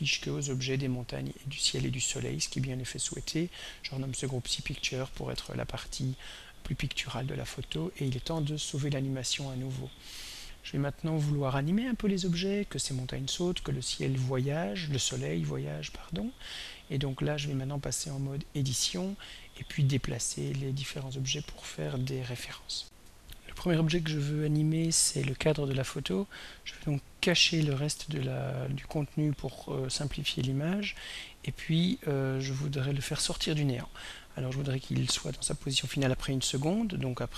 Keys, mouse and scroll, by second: 2.8 click, 3.4 click, 4.3-5.6 typing, 7.6 click, 8.3 ctrl+s, 22.8 r, 26.4 click, 28.7 click, 30.7 click, 36.1 click.